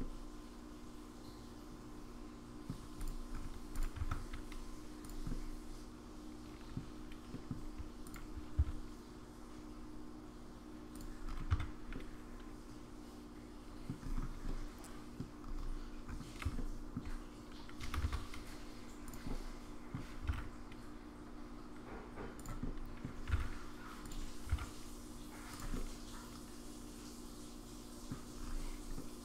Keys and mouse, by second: 0.0-2.7 middle drag, 3.7 click, 4.0 Tab, 5.0 click, 5.3-6.8 middle drag, 7.3 middle click, 8.0 shift+click, 8.6 s, 11.5 Tab, 11.9-13.9 middle drag, 14.5-15.2 middle drag, 16.6 shift+middle click, 17.8 g, 19.3-19.9 middle drag, 20.2 g, 22.7 middle click, 23.3 r, 24.4 g, 25.7-28.1 middle drag, 28.9-29.2 middle drag.